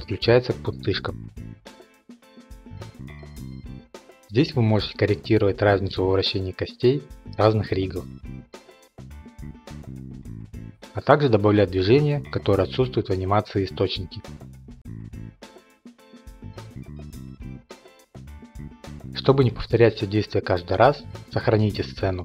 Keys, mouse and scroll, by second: 0.0 click, 0.5 click, 0.9 click, 1.2 click, 2.5 click, 2.8 click, 3.3 click, 3.5 click, 3.9 click, 4.7 click, 4.8 ctrl+Tab, 4.9 click, 5.7 scroll, 8.1 click, 8.4 click, 8.8 0, 8.9 Return, 9.3-11.0 middle drag, 9.3 scroll, 10.1 scroll, 11.4-11.9 drag, 11.9 k, 12.1 r, 12.6 click, 12.9 i, 13.2 click, 14.4 click, 14.7 k, 15.9 click, 16.1 ш, 16.3 click, 16.8 click, 17.1 b, 17.5 click, 20.7 click, 21.9 click.